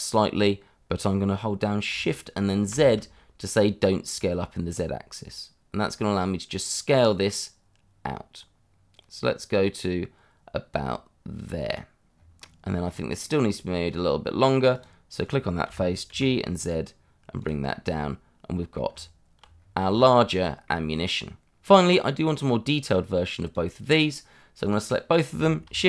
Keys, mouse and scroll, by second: 2.7 shift+z, 12.1 click, 12.1 scroll down 1, 12.4 middle click, 12.8 scroll up 1, 13.2 middle click, 14.7 click, 15.6 g, 16.1 z, 17.4 click, 17.8 middle click, 18.8 Tab, 19.5 scroll down 1, 19.9 shift+middle click, 20.2-20.6 scroll up 1, 20.6 middle click, 21.6 middle click, 22.3 click.